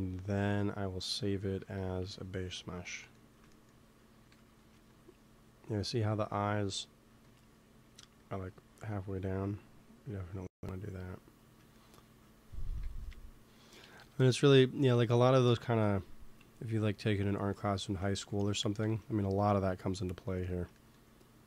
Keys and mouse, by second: 1.4 KP_3, 1.9 KP_1, 4.3 g, 4.5 f, 7.0 f, 7.2 click, 7.9 f, 8.4 click, 8.6 f, 9.2-11.3 drag, 12.7 ctrl+s, 13.7 KP_1, 13.9 KP_3, 16.1 f, 16.7-20.1 drag, 18.7 ctrl+s, 21.3 f.